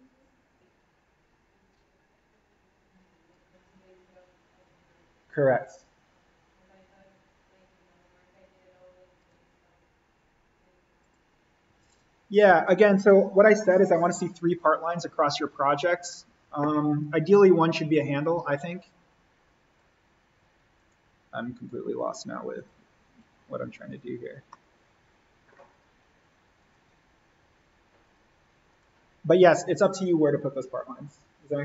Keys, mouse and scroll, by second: 9.1 click, 15.6 click, 18.8-20.7 drag, 24.5 middle click, 24.6 scroll, 25.7 click.